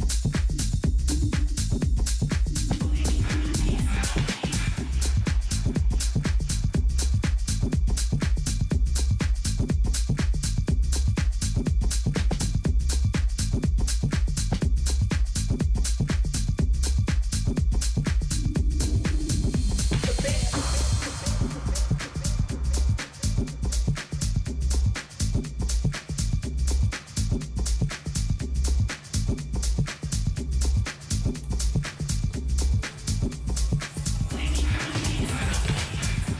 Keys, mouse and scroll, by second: 0.4-3.0 middle drag, 5.2 k, 14.0 a, 15.3 middle click, 16.0-19.6 middle drag, 22.7-26.5 middle drag, 23.3 k, 30.4 a, 31.0-33.4 middle drag, 33.8 k.